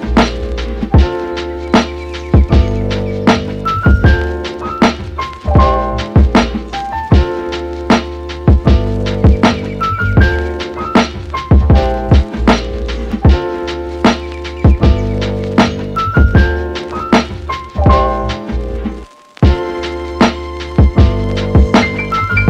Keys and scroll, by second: 13.3-14.6 typing, 20.5 f.